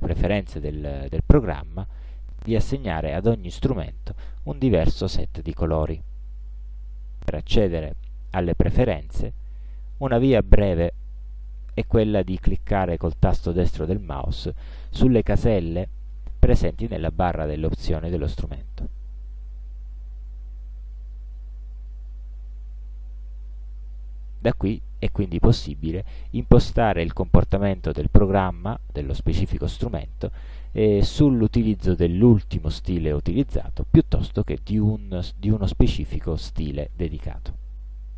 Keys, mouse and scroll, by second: 18.9 right click.